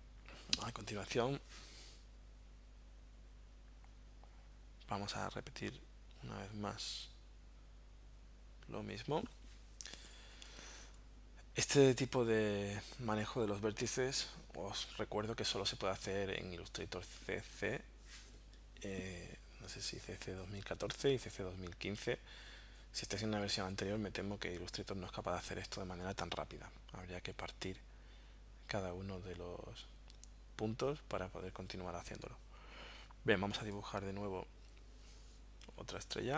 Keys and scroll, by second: 9.9 space.